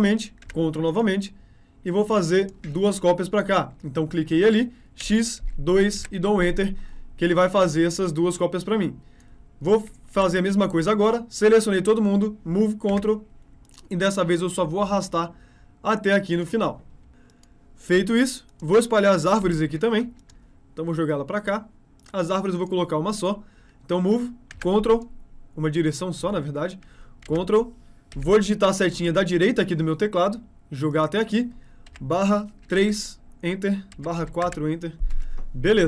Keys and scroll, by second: 12.4 m, 23.7 m, 28.1 Right.